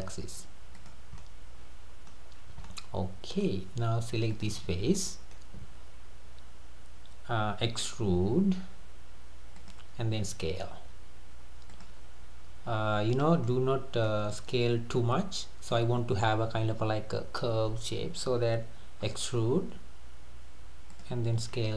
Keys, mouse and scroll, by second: 1.2-2.3 middle drag, 2.3-2.7 scroll up 2, 2.7-4.3 middle drag, 4.3 click, 4.7 scroll down 3, 5.0-7.9 middle drag, 7.9 e, 10.3 s, 12.8 scroll down 1, 13.1-13.7 middle drag, 13.7-14.0 scroll up 2, 14.1-15.3 middle drag, 15.3 scroll down 2, 19.1 e, 21.5 s.